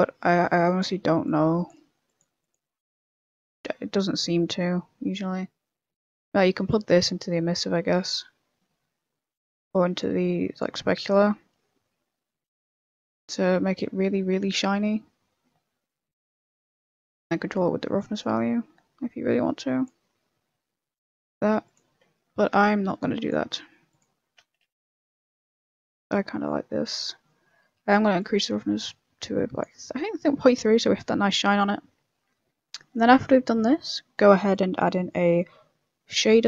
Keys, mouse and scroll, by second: 0.2 click, 1.2 click, 2.4 click, 6.7 click, 10.0 click, 13.4 middle click, 16.0 click, 20.0 middle click, 21.6 click, 22.5 click, 24.9 Delete, 24.9 click, 25.6 middle click, 26.1 middle click, 28.2 click, 29.8 middle click, 32.0 shift+middle click, 32.8 middle click, 33.2 middle click, 33.7 shift+middle click, 34.0 middle click, 34.5 shift+middle click, 34.5 click, 34.9 middle click, 35.0 middle click, 35.3 shift+a.